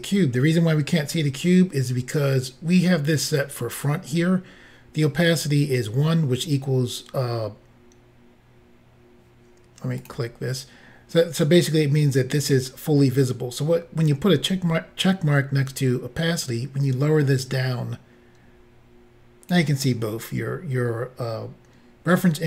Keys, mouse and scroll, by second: 10.0 click, 16.4 click.